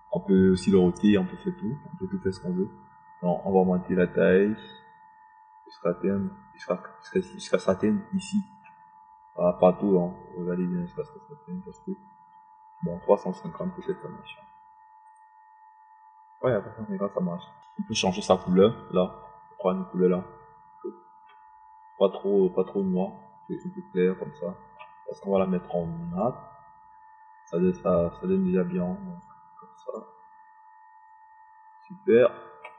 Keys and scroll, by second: 15.7 KP_3, 15.9 KP_5, 16.4 KP_0.